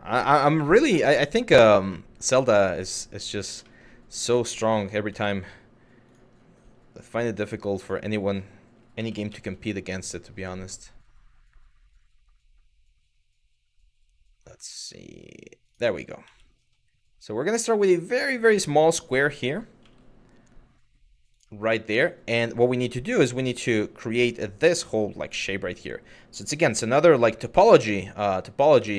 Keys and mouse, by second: 1.8 click, 3.3 shift+middle drag, 4.8 shift+a, 6.8 g, 7.4 click, 8.6 r, 15.3 ctrl+click, 15.8 s, 17.0 click, 19.4 g, 20.9 click, 26.2 g, 27.4 click, 28.4 Tab.